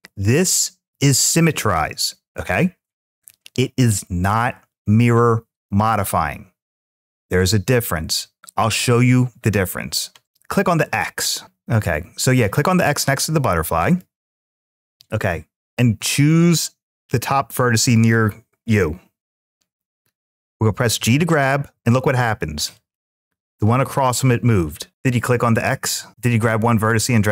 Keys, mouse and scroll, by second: 13.6 click, 20.8 g, 22.5-23.8 drag.